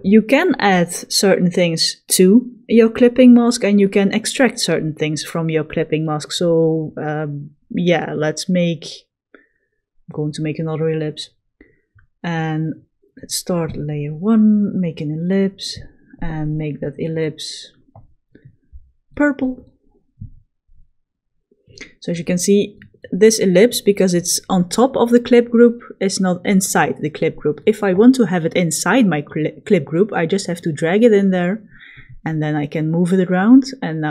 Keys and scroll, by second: 9.0 l, 21.0 v.